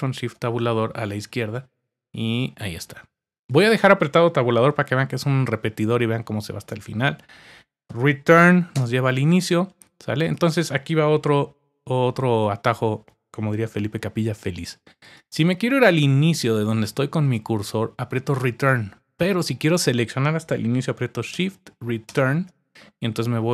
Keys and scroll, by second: 0.0 alt+shift+Tab, 4.6 Tab, 5.1 Tab, 5.2 typing, 13.4 typing.